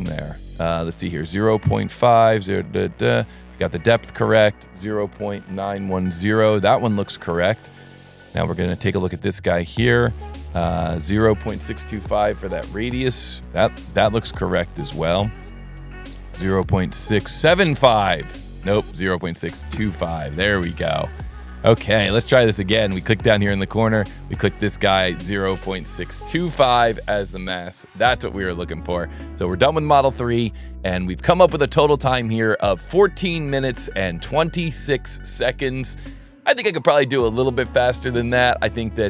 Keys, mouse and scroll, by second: 1.3 right click, 8.0 click, 8.1 click, 13.3 middle click, 13.3 scroll, 14.6 click, 16.7 middle click, 17.0 middle click, 18.0 right click, 18.2 right click, 21.0 click, 21.4 scroll down 2, 21.6 scroll up 1, 23.2 click, 24.1 right click, 28.6 click, 29.8 click, 38.8 right click, 38.9 click.